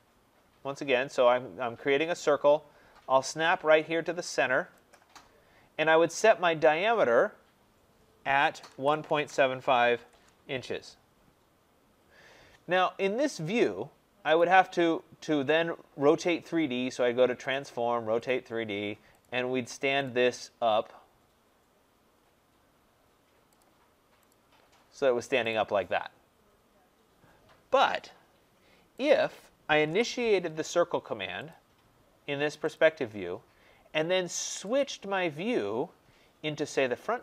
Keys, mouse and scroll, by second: 4.8 click, 8.3-10.3 typing, 14.3 click, 17.4 click, 18.2 click, 19.2 click, 20.0 click, 22.0 scroll, 23.5 click, 24.2 click, 24.8 scroll, 25.0 middle click, 25.4 click, 29.0 click, 29.8 Delete, 31.4 click, 32.7 click, 34.5 click, 34.7 click, 35.6-36.5 scroll, 36.5-37.2 scroll.